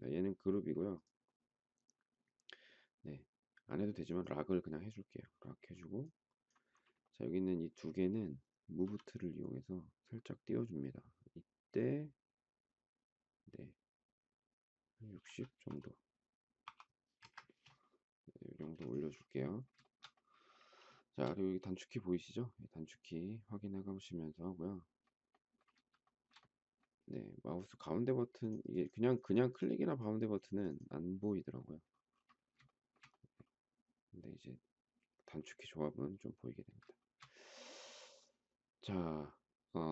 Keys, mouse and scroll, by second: 8.8 m, 15.1 6, 16.6 0, 17.0 Return, 18.6 space, 19.9 shift+middle click, 20.9 shift+middle click, 26.0 shift+middle click, 32.6 shift+middle click, 36.9 shift+middle click.